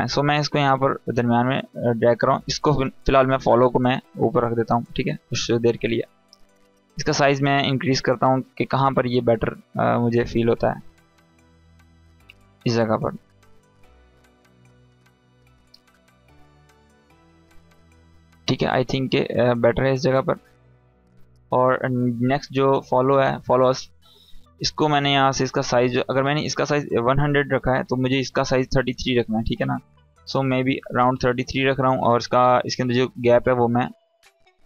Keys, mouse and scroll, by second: 12.1 space, 12.3-12.9 click, 12.7 space, 13.0-18.2 drag, 27.8 click, 32.7-33.9 drag.